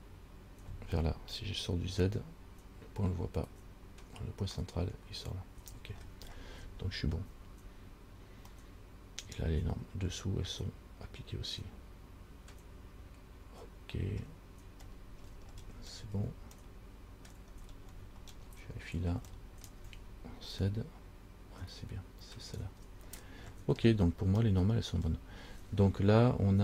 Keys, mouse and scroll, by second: 1.9 z, 3.7 z, 5.8 z, 6.1-7.4 scroll down 15, 8.8 middle click, 15.1 shift+middle click, 15.7-16.7 scroll up 5, 16.8 shift+middle click, 17.7-18.8 scroll up 7, 19.5 shift+middle click, 20.7 z, 22.9 z, 23.3-24.2 scroll down 13, 24.7 shift+middle click, 24.9 shift+middle click.